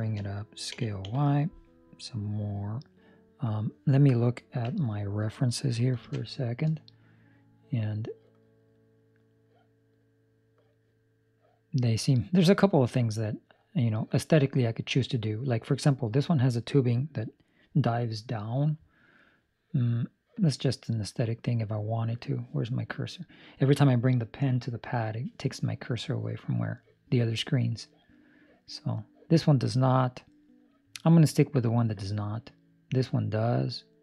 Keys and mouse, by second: 0.6 s.